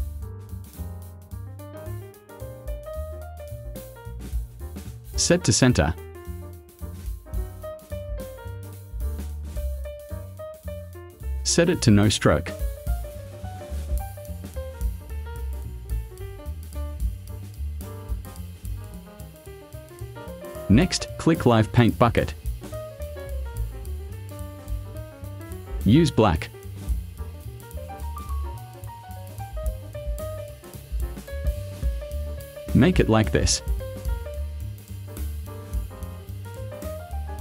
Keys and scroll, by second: 0.0-3.7 typing, 18.5 v.